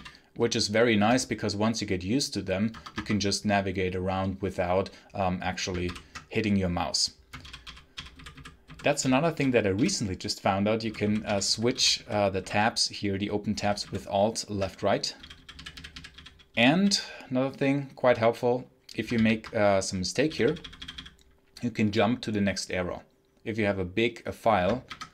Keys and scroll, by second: 2.6 Escape, 2.9 Escape, 5.7 alt+Left, 7.3 alt+Right, 7.5 alt+Right, 7.8 alt+Right, 8.0 alt+Left, 8.5 alt+Left, 8.9 alt+Right, 9.2 alt+Right, 9.6 alt+Right, 10.7 alt+Left, 11.1 alt+Right, 11.4 alt+Left, 11.6 alt+Right, 11.9 alt+Left, 12.2 alt+Left, 13.5 alt+Right, 13.7 alt+Left, 14.8-17.2 typing, 19.0 ctrl+d, 20.1 k, 24.8 F2.